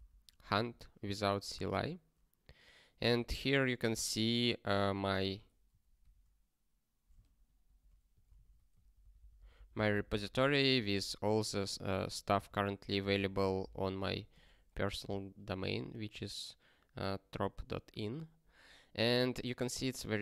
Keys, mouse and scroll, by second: 1.4 ctrl+n, 5.1 click, 6.2 ctrl+j, 7.3 shift+6, 7.6 shift+6.